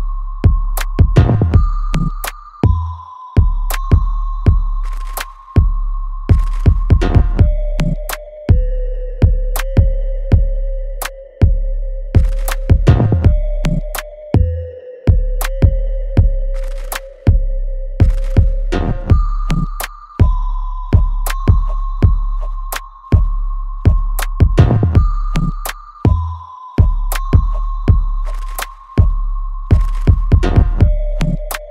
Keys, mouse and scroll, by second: 7.7-10.7 right drag, 12.1 right click, 12.2-13.6 alt+right drag, 13.6 click, 13.9 alt+click, 16.2 alt+right click, 16.6 alt+click, 17.7 ctrl+z, 21.8 click, 22.2 alt+click, 22.7 alt+right click, 24.4 click, 27.7-31.7 ctrl+drag.